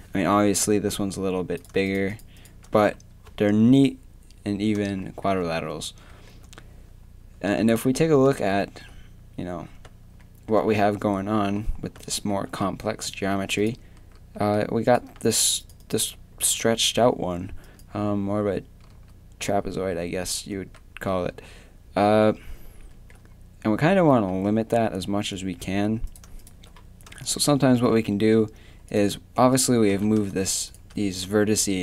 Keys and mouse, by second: 2.4 shift+click, 2.7 a, 14.2 z, 14.5 z, 18.9-22.0 typing, 23.9 z, 24.5 z, 26.1 right click, 27.8 g.